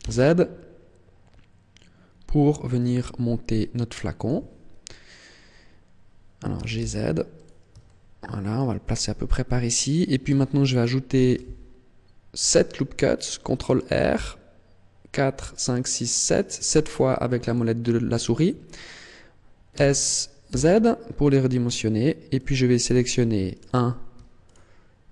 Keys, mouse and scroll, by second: 4.2 click, 4.8-5.7 scroll up 2, 6.5 g, 7.3 click, 7.8 shift+middle click, 11.1 ctrl+r, 17.5 click, 19.7 s, 22.4 click, 23.5 alt+right click, 24.4 alt+shift+right click.